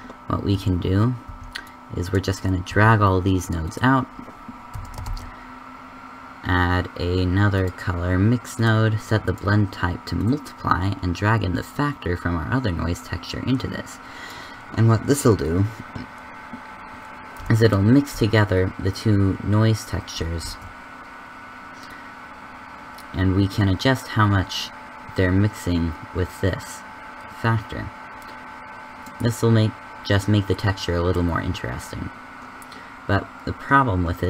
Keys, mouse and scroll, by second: 2.1 a, 2.1 b, 2.9 g, 4.7 a, 18.6-19.6 drag, 20.3 shift+z.